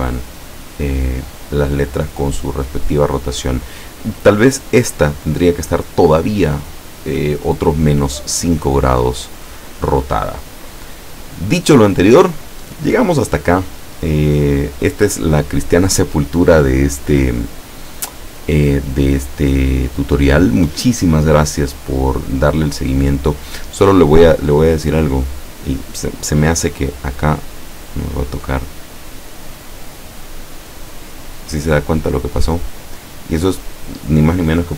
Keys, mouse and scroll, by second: 27.0-29.7 middle drag, 30.1-30.4 scroll down 1, 34.6 click.